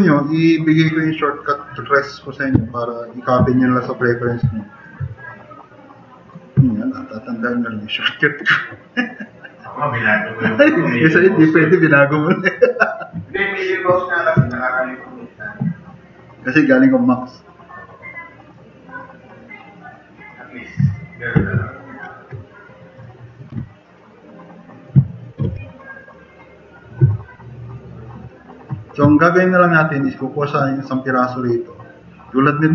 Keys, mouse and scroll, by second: 0.3-2.0 drag, 2.6 s, 7.3 s, 7.4-8.2 drag, 8.8 click, 14.0 click, 15.6-16.0 drag, 20.9 click, 21.6 click, 23.5 t, 23.8-24.8 drag, 25.1 click, 25.2-26.0 typing, 26.1 click, 27.1 drag, 27.5 click, 28.3 click, 29.1 click.